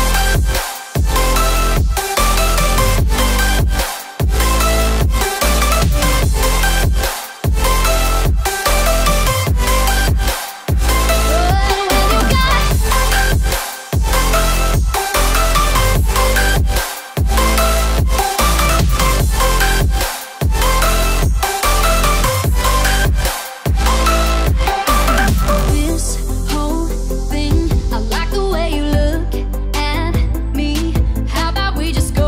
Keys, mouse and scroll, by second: 4.2-18.4 drag, 18.4 scroll down 1, 19.2-19.7 alt+scroll down 1, 20.0 alt+scroll up 1, 22.8 v, 23.3 click, 24.0 v, 25.9 alt+click, 27.0 ctrl+z, 27.2 alt+scroll up 1, 27.4 click, 28.2 click, 28.8 ctrl+z, 28.9 click, 29.1 Right, 29.4 Up, 30.2 click, 30.8-31.5 scroll up 2.